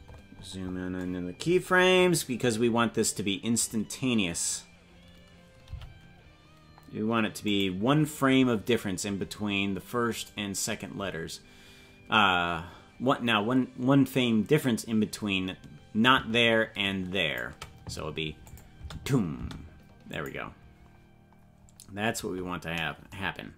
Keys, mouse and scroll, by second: 0.1-1.6 scroll up 19, 1.6-2.6 scroll up 2, 2.6 scroll up 1, 5.6 g, 10.2 right click, 16.0-17.4 drag, 18.4 click, 18.7 space, 19.3 space, 20.1 click.